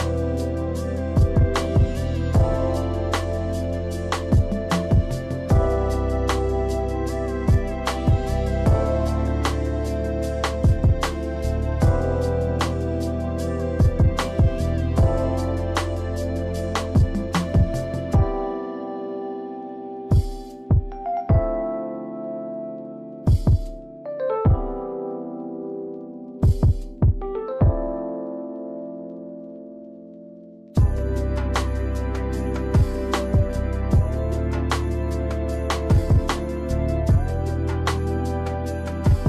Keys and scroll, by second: 2.8 space, 3.6 space, 6.9 space, 8.6 space, 12.0 space, 12.9 space, 25.1 ctrl+c, 25.5 ctrl+v, 36.2 Delete.